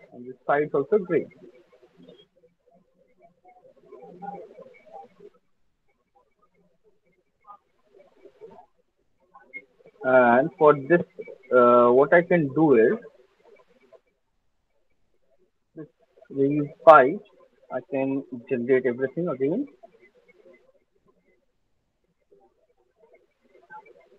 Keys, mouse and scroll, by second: 0.5 click, 1.4 alt+click, 2.0 click, 2.6 alt+right click, 2.9 alt+click, 3.4 alt+middle click, 3.8 alt+click, 4.2 alt+middle click, 5.2 alt+click, 6.2 click, 6.7 click, 6.9 alt+click, 7.6 click, 7.6 alt+click, 8.5 alt+right click, 8.7 alt+click, 9.1 alt+middle click, 9.6 alt+right click, 9.9 alt+middle click, 10.7 click, 13.1 alt+click, 13.9 alt+middle click, 14.9 alt+scroll, 16.1 alt+click, 16.8 alt+click, 17.2-17.6 alt+scroll, 17.6 alt+middle click, 18.2 alt+click, 18.2 alt+right click, 18.7 ctrl+s, 20.1 alt+right click, 21.6 alt+right click, 22.1 alt+click, 22.5 alt+middle click, 24.1 alt+click.